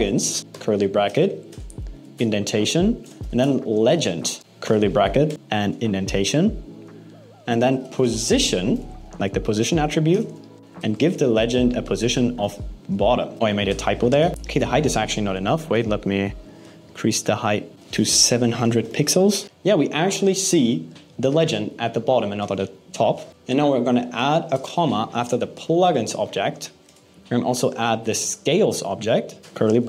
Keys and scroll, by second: 0.4 alt+8, 1.6 Up, 4.1 shift+:, 4.2 shift+space, 4.4 alt+8, 5.3 Up, 9.9 shift+space, 10.3 shift+', 13.3 BackSpace, 17.7 BackSpace, 23.3 BackSpace, 29.4 alt+8.